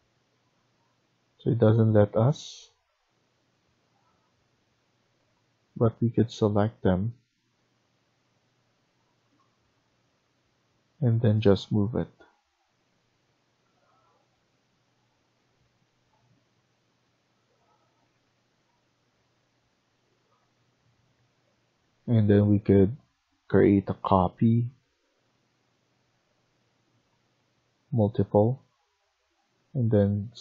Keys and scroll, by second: 0.4 Escape, 0.7 Escape, 12.1 Down, 12.6 Down, 12.8 Down, 13.0 Down, 13.2 Down, 13.4 Down, 13.5 Down, 13.7-16.0 Down, 17.0-18.1 scroll down 10, 18.1-19.0 scroll up 6, 19.0 Up, 19.6 Up, 20.1 Up, 20.7 Up, 21.2 Up, 22.1 Up.